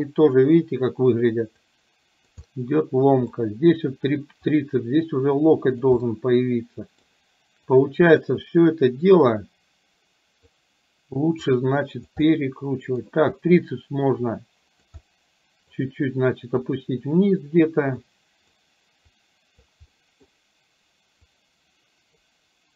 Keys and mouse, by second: 0.0 click, 1.7 click, 2.5-3.5 middle drag, 4.6-6.0 drag, 6.1-7.1 middle drag, 7.8 click, 9.3-10.6 drag, 11.6 click, 12.3 middle click, 14.3 click, 15.1 middle click, 16.7 click, 18.2 click, 19.1 click, 20.0 middle click, 21.3-22.3 drag.